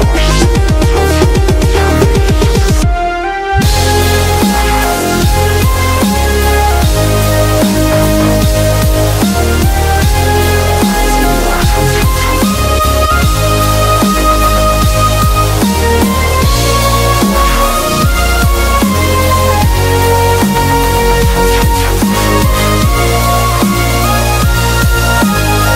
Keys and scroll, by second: 10.5 b.